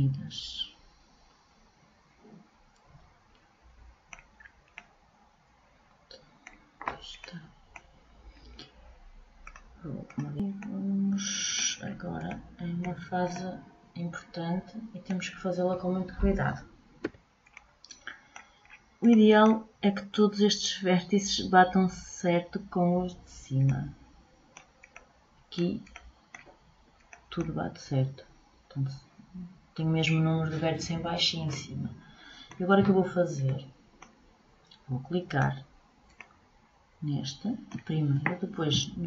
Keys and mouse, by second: 16.6 a, 33.2-34.2 middle drag, 35.8 middle click, 36.8-39.0 middle drag.